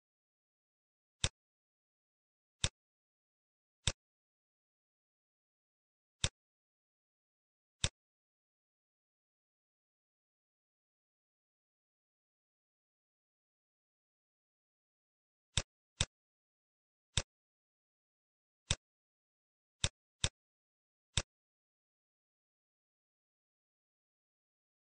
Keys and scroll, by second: 0.3 n, 1.6 shift+a, 10.6 shift+a, 20.1 shift+a, 22.5 shift+a.